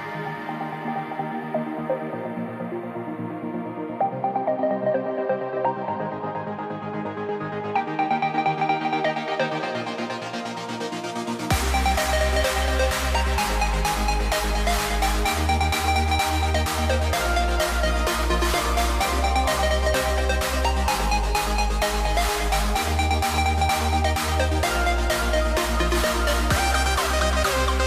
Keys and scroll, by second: 2.6 v, 4.7 BackSpace, 8.8-11.2 typing, 12.0 super+a, 20.7 super+z, 21.5 super+a.